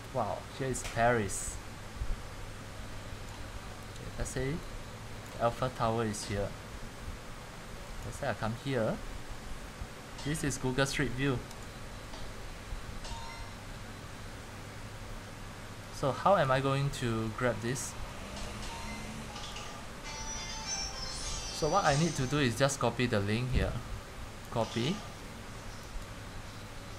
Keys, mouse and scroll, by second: 3.3 click, 4.6 click, 12.2 click, 12.4-16.4 drag, 16.5 click, 18.7 click, 19.6 click.